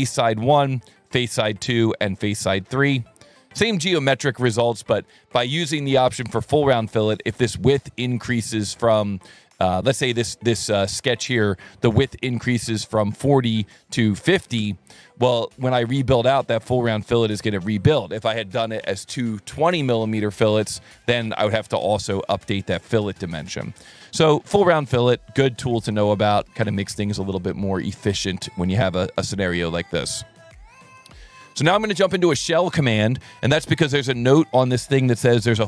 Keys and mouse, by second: 1.0 click, 1.9 click, 5.5 click, 8.3 click, 11.1 click, 11.3 click, 13.4 click, 13.6 click, 14.3 KP_5, 14.3 KP_0, 14.6 KP_Enter, 16.0 click, 23.7 click, 23.9 click, 25.1 click, 26.3 KP_4, 26.6 KP_Enter, 28.2 click, 32.8 click, 34.1 click.